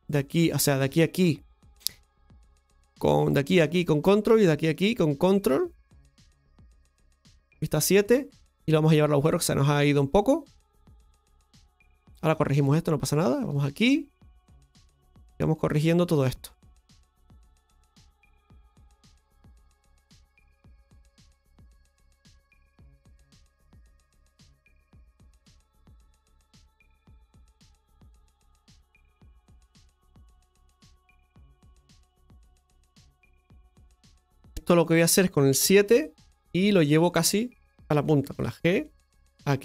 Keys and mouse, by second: 0.0 right click, 0.8-2.4 shift+right drag, 3.1 right click, 3.9 ctrl+right click, 4.6 ctrl+right click, 5.3 ctrl+right click, 7.3 KP_7, 9.2 click, 10.1-12.2 drag, 13.2 right click, 13.5 shift+right click, 14.3-15.7 drag, 17.1 shift+right click, 17.5 shift+right click, 18.2 click, 19.8 click, 20.7-21.8 drag, 22.7 click, 24.0-25.2 drag, 25.2 right click, 25.7 shift+right click, 26.3 click, 27.3 right click, 27.8 shift+right click, 28.4 click, 29.4 right click, 29.8 shift+right click, 30.5 click, 31.4-34.5 middle drag, 36.3 middle click.